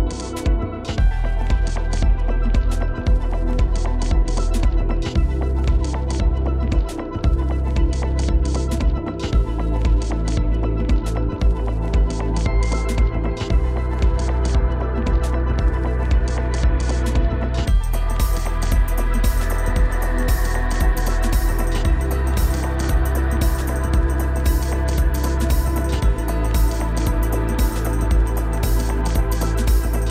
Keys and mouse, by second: 0.3 shift+d, 10.6-11.2 shift+middle drag, 11.7 shift+middle click, 11.9-12.5 middle drag, 13.1 Tab, 13.9 click, 14.6 click, 15.1-16.5 middle drag, 17.2-17.9 middle drag, 19.2 middle click, 20.1 click, 20.5-21.2 middle drag, 25.6 ctrl+z, 27.2 click.